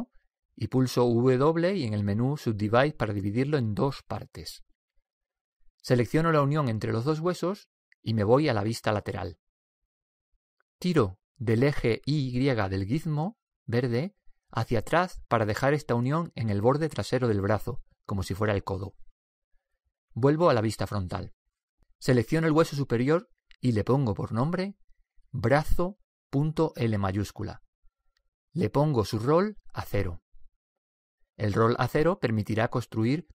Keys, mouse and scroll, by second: 1.3 w, 7.9-9.6 right drag, 9.9 KP_3, 12.6-14.4 drag, 18.6-20.3 middle drag, 21.7 KP_1, 23.6-25.2 right drag, 24.5-26.3 drag.